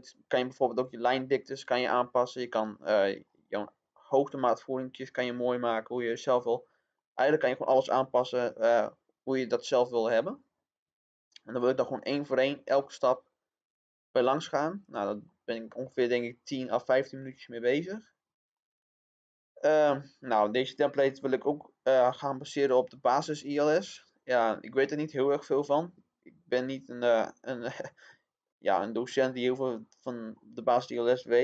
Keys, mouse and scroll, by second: 6.7 scroll down 1, 6.9 middle click, 14.5-14.9 scroll down 1, 15.2-29.2 middle drag, 29.2-30.0 scroll up 1.